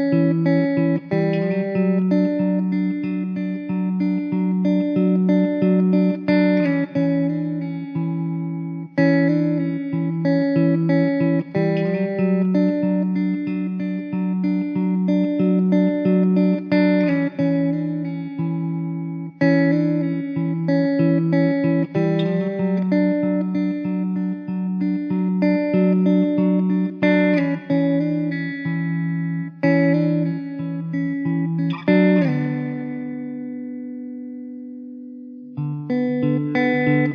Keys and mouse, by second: 1.8 middle click, 9.0 alt+w, 9.6 middle click, 10.6 2, 16.2 alt+w, 16.8 middle click, 19.9 ctrl+z, 20.4 alt+w, 22.7 alt+w, 29.5 alt+w, 30.3 middle click.